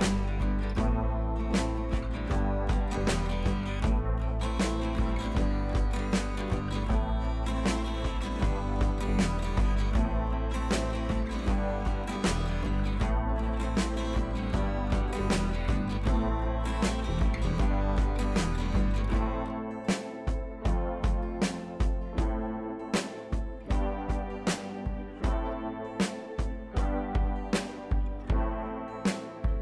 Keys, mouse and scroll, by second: 6.6 click, 9.0 shift+click, 9.8 click, 15.9 ctrl+[, 16.9 click, 18.5 ctrl+[, 19.8 click, 21.3 ctrl+], 22.6 click, 27.9 right click, 28.6-29.6 drag.